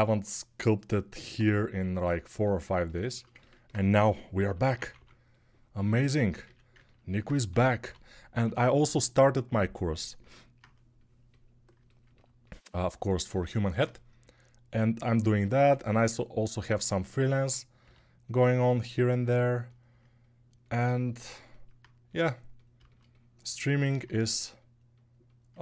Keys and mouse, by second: 3.8-4.7 typing, 6.2 a, 7.2 g, 7.7 ], 8.2 ], 14.7 a, 16.6 a, 17.6 g, 19.0-25.6 ctrl+alt+drag.